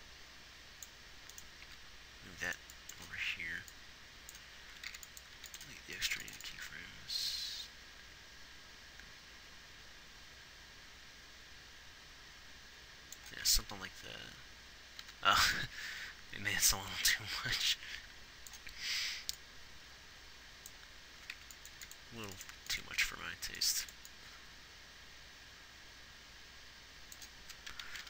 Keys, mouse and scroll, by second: 1.9 g, 6.4 x, 13.9 alt+a, 15.4 alt+a, 22.8 x.